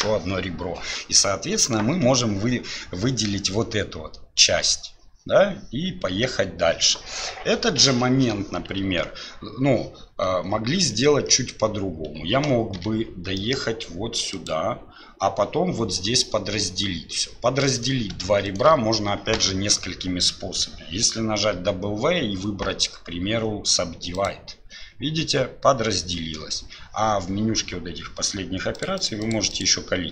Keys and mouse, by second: 1.6-8.8 drag, 10.3 ctrl+z, 10.8 ctrl+z, 12.8 g, 17.8 click, 18.5 shift+click, 21.5 w, 28.8 click, 29.0 click, 29.2 click, 29.5 click.